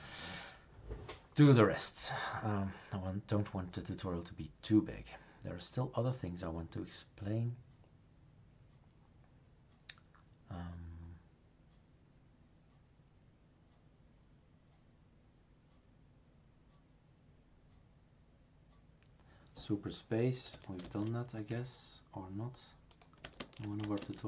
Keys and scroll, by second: 20.8 super+space, 23.4 super+space.